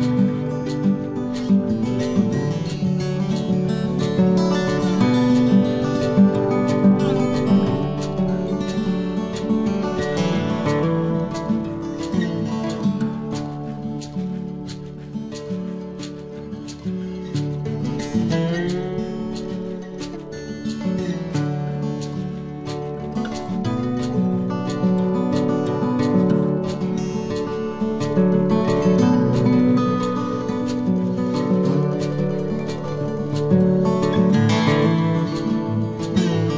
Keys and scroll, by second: 5.3 f, 19.1 Return, 25.4 Return.